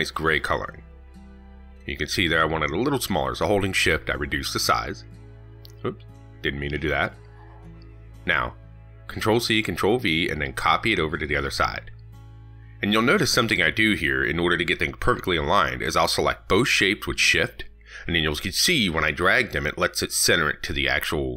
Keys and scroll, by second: 7.2 ctrl+z, 8.8 ctrl+c, 9.0 ctrl+v.